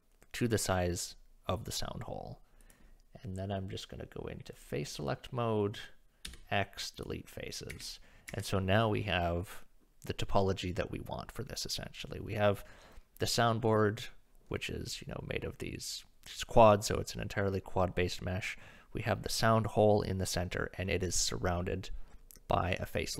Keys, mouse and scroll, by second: 4.5 click, 6.2 x, 7.7 Tab, 8.3 Tab.